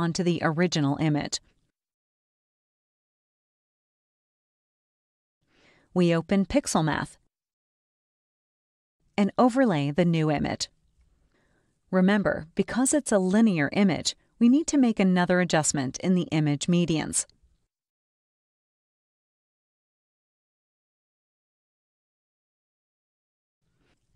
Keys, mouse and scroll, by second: 0.6-2.8 ctrl+drag, 0.6 ctrl+right click, 3.7-4.1 ctrl+scroll up 1, 7.2 click, 8.9-10.2 scroll up 1, 10.6-16.1 typing, 16.9-19.1 drag, 19.8 scroll down 1, 21.7 click, 23.1 click.